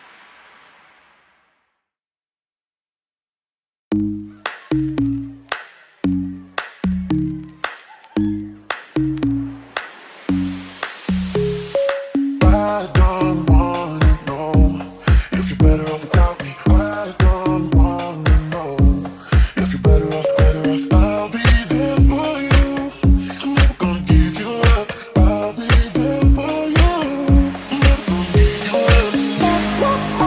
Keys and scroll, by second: 1.8 Escape, 2.3-9.0 typing, 10.2-12.4 typing, 26.3 d, 26.7 a.